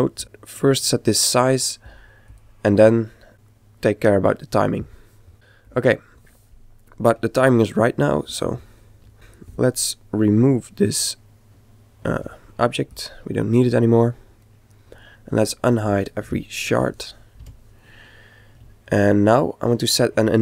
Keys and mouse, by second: 0.2 click, 2.3 click, 5.3 click, 9.1 click, 10.3-12.1 right drag, 12.1 x, 15.7 alt+h, 16.9 a, 18.8-20.4 middle drag.